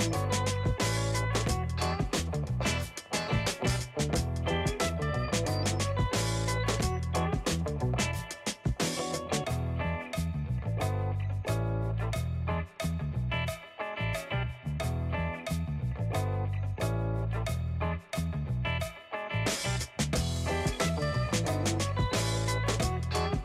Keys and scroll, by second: 21.7 shift+8, 22.7 Tab.